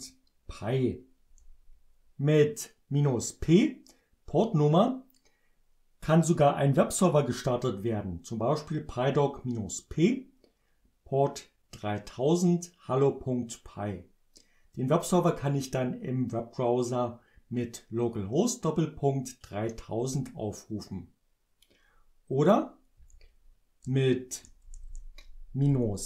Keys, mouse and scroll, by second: 1.3 Return, 23.0 Left, 23.8 BackSpace.